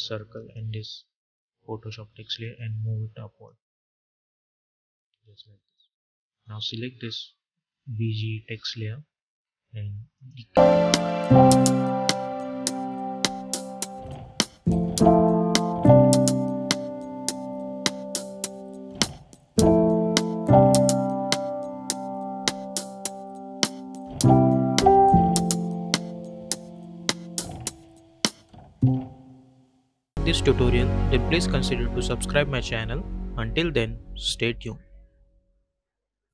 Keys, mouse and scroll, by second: 0.2-6.3 shift+drag, 10.0 click.